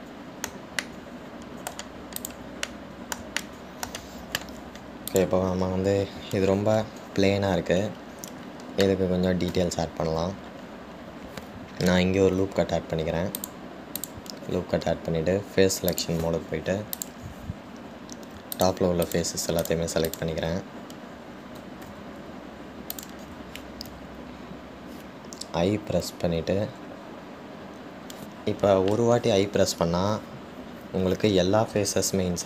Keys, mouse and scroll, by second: 1.6-3.4 shift+middle drag, 3.4 click, 3.8-6.2 middle drag, 6.2 click, 11.4-13.4 scroll up 1, 13.4 ctrl+r, 17.1 click, 18.1 click, 19.8 shift+click, 20.3 shift+click, 20.8 shift+click, 21.3 shift+click, 23.1 ctrl+z, 24.1 shift+click.